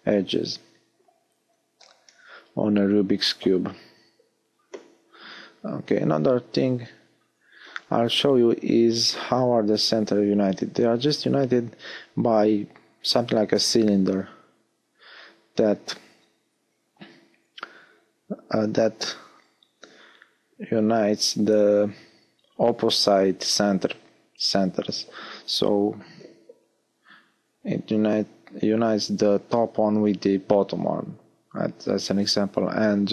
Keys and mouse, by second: 1.2 shift+c, 10.9 shift+a, 14.3-16.9 middle drag, 15.0 s, 16.9 KP_1, 20.6 Tab, 22.1 z, 23.4-25.3 drag, 25.3-29.6 middle drag, 29.6 s, 31.5-33.1 drag.